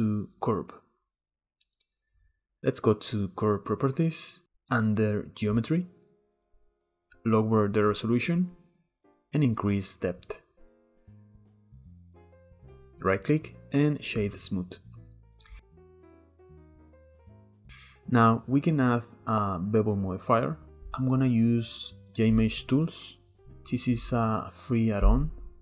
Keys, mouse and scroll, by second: 3.0 click, 3.7-4.5 scroll down 2, 4.5 click, 5.2-7.0 scroll down 2, 7.0-11.5 drag, 11.5-12.6 shift+middle drag, 12.6-15.3 right drag, 15.4 click, 16.8 click, 17.0-17.6 middle drag, 17.6-19.4 scroll up 2.